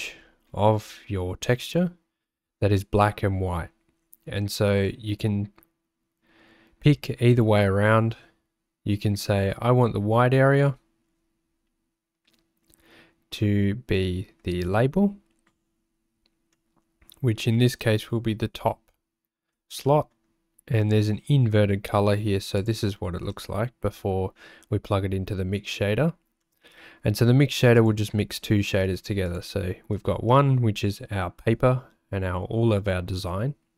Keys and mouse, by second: 16.6 click, 19.9 click, 26.5 click, 27.8 click.